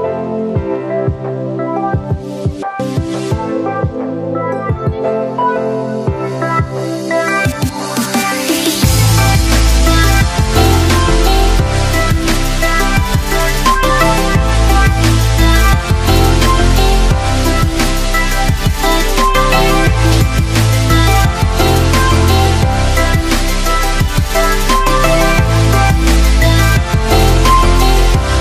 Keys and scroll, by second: 6.1 x, 14.7 x, 20.3 x, 22.2 x, 24.7 x.